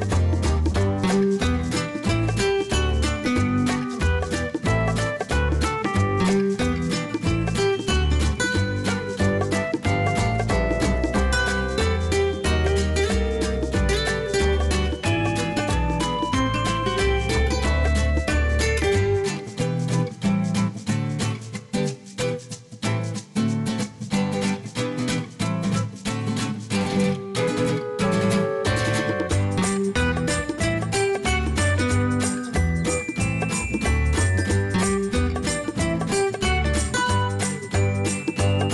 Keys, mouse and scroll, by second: 2.4 scroll down 1, 3.7 click, 6.3 scroll down 1, 7.4 click, 10.1 click, 12.7 scroll down 1, 14.0 click, 16.3 click, 17.9-19.0 scroll down 1, 20.7 click, 24.3-25.0 scroll down 1, 25.0 scroll up 1, 26.9 scroll up 1, 33.1-33.9 typing, 36.5-38.7 drag.